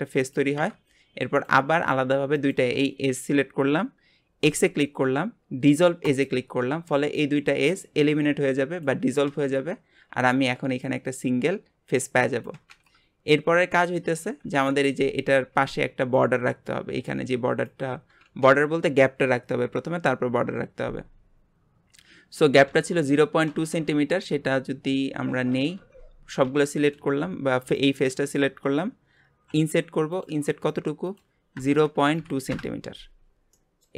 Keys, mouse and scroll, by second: 1.3 click, 2.3 shift+click, 4.4 x, 9.7-11.6 scroll down 2, 14.4 KP_Divide, 21.3-22.7 scroll up 2, 23.9-24.2 scroll up 2, 24.3 Tab, 25.4 KP_Divide, 25.8 Tab, 26.4 a, 27.6 click, 28.6-29.5 scroll up 2, 29.5 i, 31.1-33.5 drag, 33.5 shift+middle click.